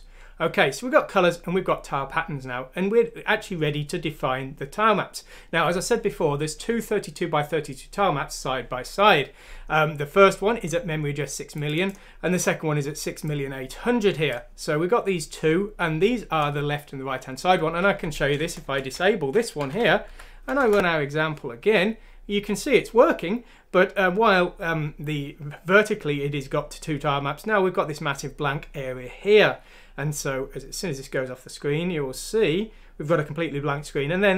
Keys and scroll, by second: 18.4 Down, 18.6 Down, 18.9 Home, 19.6 ;, 20.0 F6, 20.6 Return.